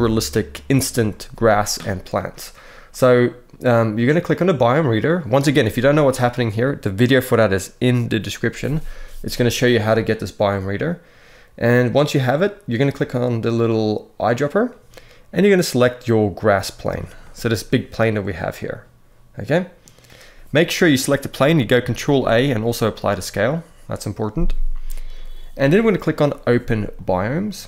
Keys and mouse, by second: 4.0 click, 16.9 middle drag, 18.2-19.5 middle drag, 21.7 ctrl+a, 26.7 click.